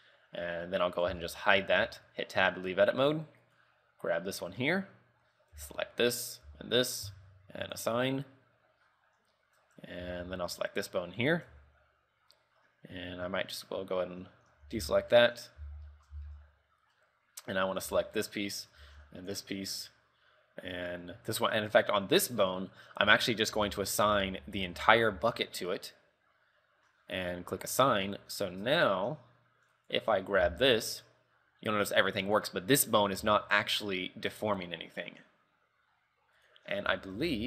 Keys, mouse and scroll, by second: 0.1 middle click, 1.3 h, 1.5 middle click, 2.1 Tab, 2.5 middle click, 4.1 right click, 4.8 Tab, 5.7 l, 6.6 l, 7.8 click, 8.3 Tab, 9.9 Tab, 10.3 Tab, 11.2 right click, 11.8 Tab, 14.7 a, 15.1 shift+middle click, 15.4 scroll up 3, 15.8 z, 16.1 shift+middle click, 16.3 z, 16.4 middle click, 18.0 l, 19.0 l, 19.1 scroll down 4, 19.4 middle click, 20.1 middle click, 23.2-25.3 typing, 25.5 middle click, 27.7 click, 27.9 Tab, 28.1 KP_3, 28.4-29.0 scroll down 3, 29.0 Tab, 29.3 z, 30.2 right click, 30.6 r, 33.5 r, 36.8 scroll down 4, 37.1 shift+middle click, 37.4 z.